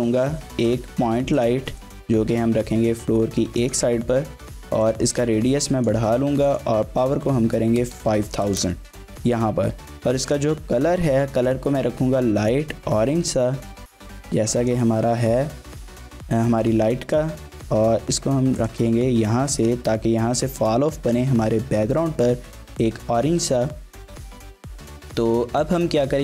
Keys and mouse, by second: 2.2 g, 3.6 click, 4.8-5.9 drag, 6.5-9.3 drag, 8.0 KP_0, 8.1 KP_0, 10.4 click, 16.1-16.6 drag, 16.9 g, 18.6 click.